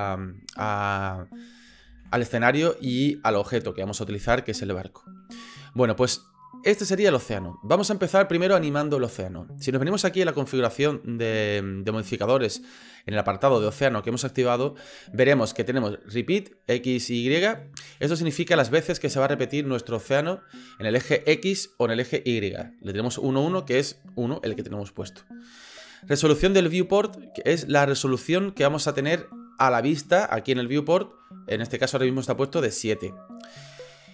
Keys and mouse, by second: 1.9 ctrl+z.